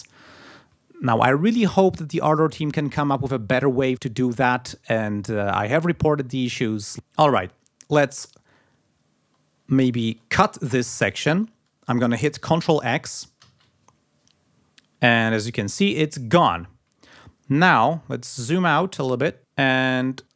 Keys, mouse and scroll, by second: 13.1 ctrl+x, 15.5 scroll down 2, 16.4 scroll down 2, 17.2 ctrl+scroll down 2, 19.4-19.9 scroll up 4.